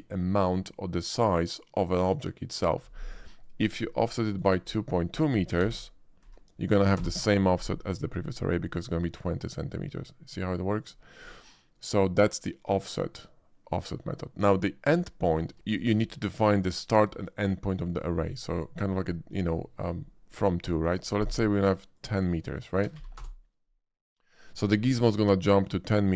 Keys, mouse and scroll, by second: 4.2 click, 5.6-6.2 typing, 6.9 Return, 8.9-10.8 middle drag, 12.0 shift+middle drag, 14.9 shift+click, 21.9 click, 22.9 1, 23.2 Return.